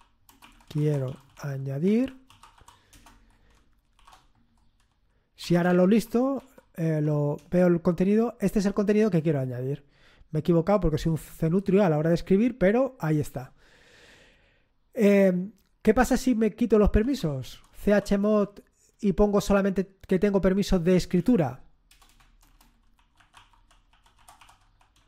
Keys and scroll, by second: 0.0-6.8 typing, 7.3 Return, 16.7-18.3 typing, 21.1-25.0 typing.